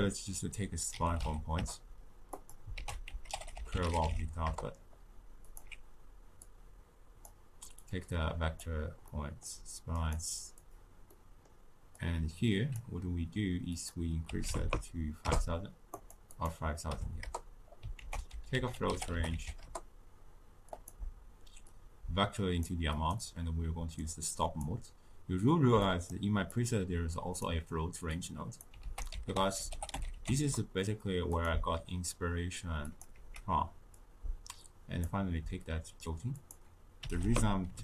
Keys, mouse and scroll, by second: 2.7 ctrl+a, 6.4 click, 7.8 drag, 9.1-10.2 middle drag, 10.2 click, 10.6 click, 11.1-11.9 middle drag, 11.9 click, 13.7 click, 14.6 0, 15.9-17.9 drag, 17.9 ctrl+a, 21.7 drag, 23.1-25.9 drag, 26.5 click, 27.1 click, 28.1 click, 28.8 ctrl+a, 32.9 click, 33.1 x, 33.9 drag, 36.3-37.8 drag.